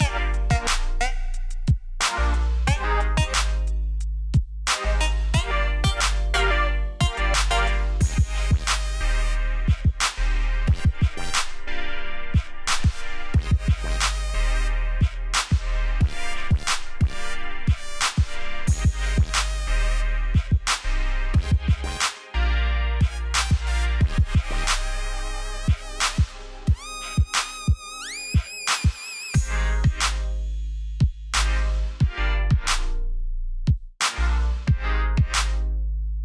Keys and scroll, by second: 2.4 super+-, 2.7 space, 9.7 super+-, 9.8 super+-, 9.8 super+-, 9.9 shift+super+a, 11.1 space, 11.5 super+=, 11.5 super+=, 11.7 space, 12.0 a, 13.5 space, 14.7 super+=, 15.0 super+-, 15.1 super+-, 15.2 shift+super+a, 15.3 v, 15.4 space, 15.4 space, 15.9 shift+p, 22.2 a, 23.6 p, 27.4-28.3 typing, 30.3 a, 33.3-35.3 typing.